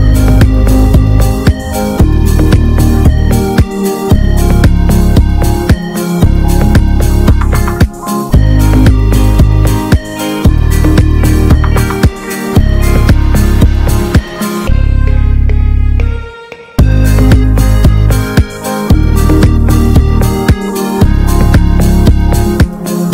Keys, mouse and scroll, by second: 1.4 click, 1.9 s, 2.9-4.6 drag, 4.6 shift+middle click, 5.0-6.1 drag, 6.1 s, 7.0 shift+middle click, 7.3 click, 7.8 s, 8.8 shift+middle click, 9.1 click, 9.4 s, 10.1 click, 10.5 shift+middle click, 11.2 s, 11.6 shift+middle click, 11.9 click, 12.5 s, 13.1 click, 13.4 s, 14.9 click, 15.4 s, 16.0 shift+middle click, 16.2 click, 16.7 s, 17.4 click, 17.7 s, 19.0 scroll down 1, 19.2 Tab, 19.3 click, 19.5 scroll up 1, 19.6 shift+middle click, 20.0 Tab, 20.2 shift+middle click, 20.7 click, 21.1 s, 22.1 click, 22.4 s.